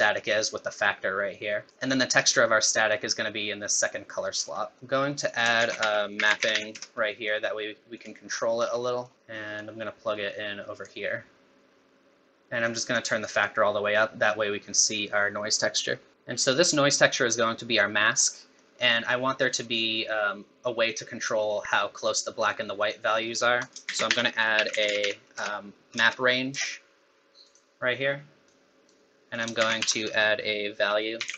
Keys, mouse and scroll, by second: 0.2 click, 4.3-4.8 scroll down 8, 4.6 middle click, 4.8 click, 4.8 scroll up 5, 5.3 click, 5.6 shift+a, 6.5 p, 8.3-8.9 scroll up 5, 8.9 middle click, 9.1 middle click, 9.1 scroll down 5, 9.6 click, 12.7 click, 18.1-18.6 scroll up 2, 18.4 middle click, 23.2-23.7 scroll up 2, 23.6 click, 23.9 shift+a, 25.0 p, 28.4 click, 29.3 click, 29.6 shift+a.